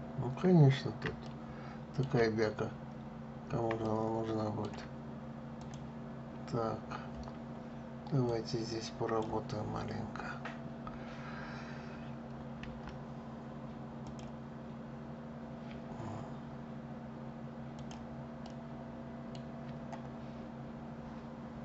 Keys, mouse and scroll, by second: 0.9-2.2 shift+middle drag, 2.2-2.9 scroll up 1, 2.9-3.5 scroll up 1, 3.5-5.3 shift+middle drag, 5.3 click, 7.9-9.6 drag, 9.6-10.8 scroll up 1, 13.8 Delete, 17.4 click, 18.1-20.0 middle drag, 20.0-20.8 scroll up 1.